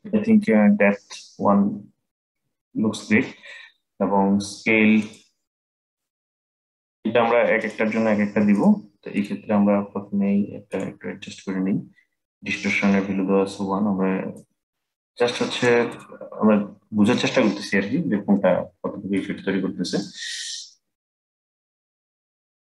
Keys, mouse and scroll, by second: 4.7-13.4 drag, 14.0-18.0 drag, 18.0-19.1 middle drag, 19.1-19.7 scroll down 4, 19.7-21.6 middle drag, 21.6-22.7 drag.